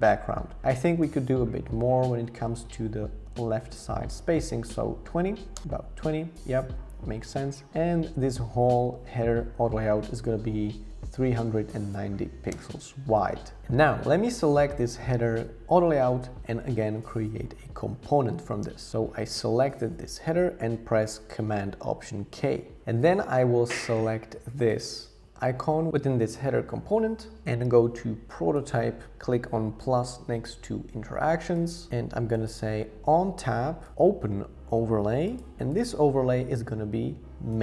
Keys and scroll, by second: 2.3 Up, 2.5 Up, 2.6 Up, 4.4 Up, 5.5 Return, 10.9-11.9 typing, 12.5 Return, 18.1 alt+super+k.